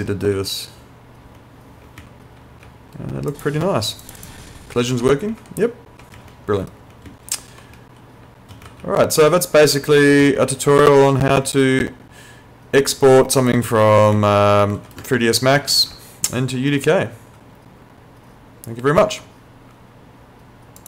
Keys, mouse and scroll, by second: 0.0-2.7 typing, 3.4 click, 4.3-8.9 typing, 10.3 s, 10.6 a, 11.3 d, 11.4 w, 13.7-16.4 typing, 19.1 Escape, 20.8 click.